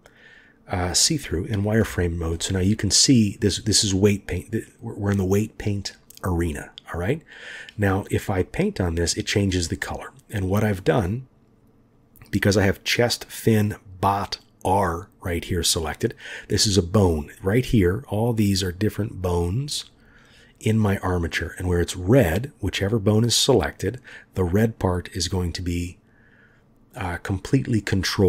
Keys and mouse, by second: 1.8 KP_1, 3.4-4.8 drag, 4.8-8.0 middle drag, 8.4 click, 9.7-10.8 middle drag, 27.0 middle click.